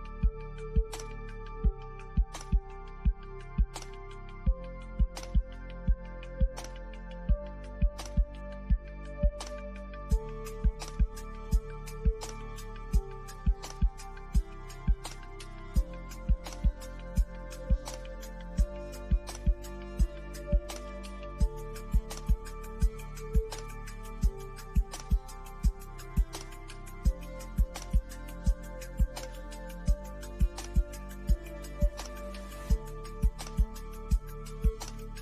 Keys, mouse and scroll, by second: 3.7 click, 8.7-9.1 scroll up 1, 9.5 middle click, 10.5-15.9 drag, 20.3 click, 23.1 click, 33.5 click.